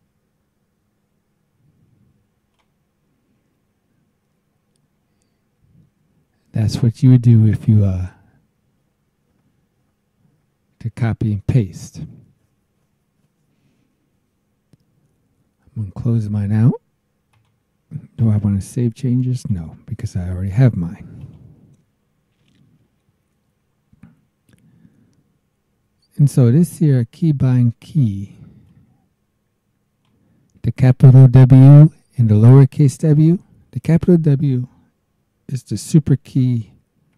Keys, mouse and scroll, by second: 2.5 click, 17.3 click, 19.4 click, 21.2 click, 22.7-23.5 scroll down 3, 24.2 scroll down 2, 28.7-30.2 drag, 37.0 super+w.